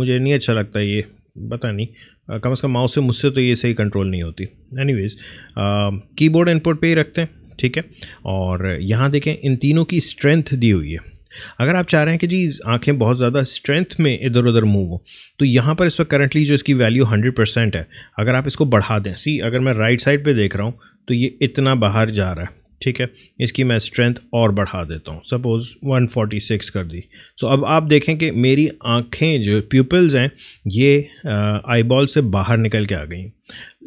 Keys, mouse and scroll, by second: 0.4 scroll up 1, 1.5-6.0 drag, 20.0 Right, 23.8 click, 28.0 Right.